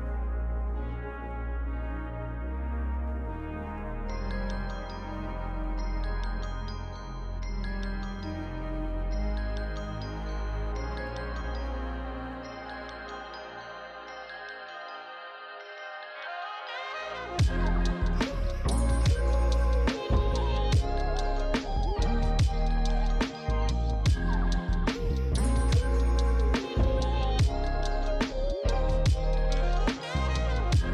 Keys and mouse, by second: 0.7 click, 11.2 click, 12.0-12.8 typing, 12.6 click, 14.6-17.8 typing, 14.9 click, 16.0 click, 16.2 click, 16.6 click, 16.9 click, 17.2 click, 17.5 click, 18.9 9, 19.0 click, 21.0 click, 23.1 click, 23.1-26.2 typing, 23.7 click, 24.3 click, 24.9 click, 26.5 click, 28.9 click, 29.3 s, 29.4 click, 29.6 g, 30.0 click.